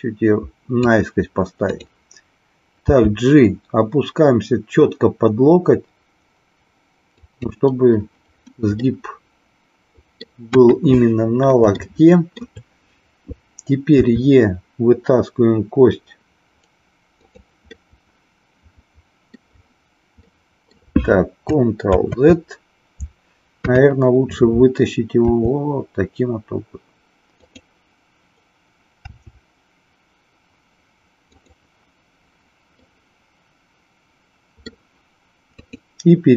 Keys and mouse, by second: 1.7 click, 2.9 g, 7.3 click, 8.9-10.3 middle drag, 10.6 KP_1, 11.7 shift+middle click, 14.0 e, 17.1 click, 17.7-19.4 middle drag, 20.2 middle click, 22.0 ctrl+z, 23.5 KP_3, 25.2 e, 27.4 click, 29.0 r, 32.9-34.8 middle drag, 35.5 click.